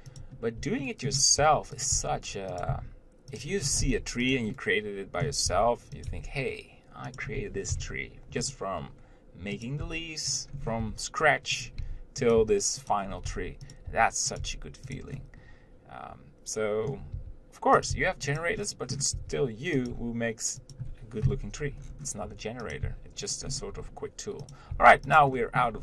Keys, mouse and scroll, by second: 0.0 g, 1.1 shift+middle click, 1.6 r, 2.2 g, 3.0 s, 3.8 scroll up 1, 4.0 g, 4.8 middle click, 5.7 r, 6.3 g, 8.6 scroll down 1, 9.9 click, 10.1-14.6 typing, 10.8 scroll up 1, 13.3 scroll up 1, 15.4-17.4 middle drag, 17.4 r, 18.2 g, 18.8 middle click, 19.2 scroll up 1, 19.4 r, 20.1 g, 22.1-23.0 scroll down 1, 23.0 click, 23.1 g, 23.7 scroll up 1, 24.0 r, 25.0 g, 25.6 shift+middle click.